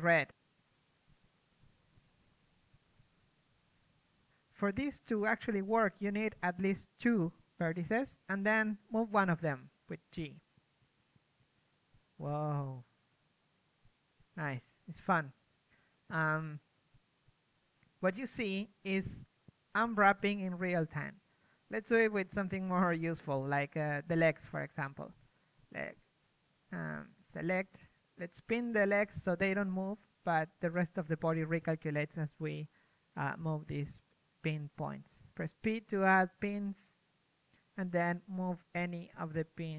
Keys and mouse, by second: 2.1 g, 6.9 p, 9.4-10.8 right drag, 11.5 g, 13.8-17.9 right drag, 13.8 a, 16.5 g, 21.7-24.6 right drag, 23.1 g, 27.2 a, 27.8-29.1 right drag, 30.2 right click, 30.4 click, 30.5-32.8 right drag, 32.8-34.4 middle drag, 34.4-37.3 right drag, 37.3 p, 39.5 a.